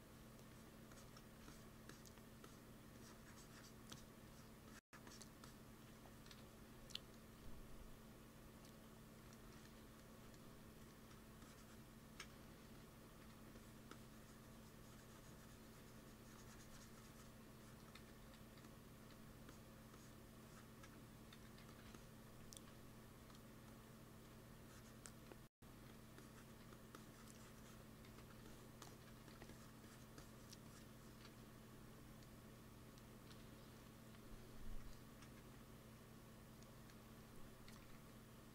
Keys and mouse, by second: 3.1-5.1 drag, 6.2 KP_1, 7.0 click, 7.1 middle click, 11.3-13.1 drag, 12.6 f, 13.1 f, 13.4-16.2 drag, 17.5-18.8 drag, 17.9 x, 18.2 f, 18.9 f, 21.2 x, 21.5 f, 24.1 f, 25.0 f, 25.6 f, 26.5 f, 27.9 f, 29.1 f, 30.6-32.7 drag, 33.2 KP_1, 35.2 ctrl+s, 37.6 g, 37.8 f.